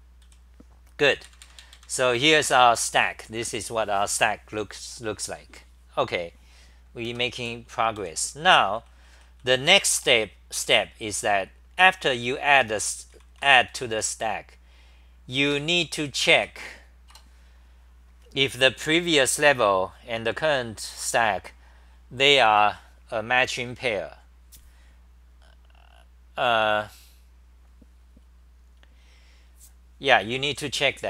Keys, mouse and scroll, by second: 0.3 w, 1.1 super+=, 2.2 c, 2.4 2, 7.4 ctrl+g, 7.4-10.1 typing, 12.9-14.4 typing, 15.5 ctrl+g.